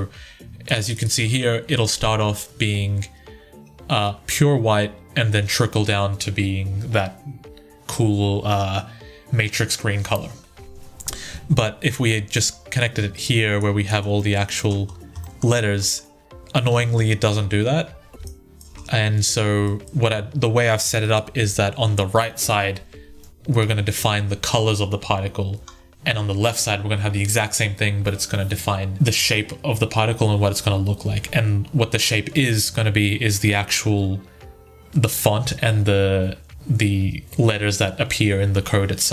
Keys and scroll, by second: 16.5 1, 21.1 Delete, 23.5 1.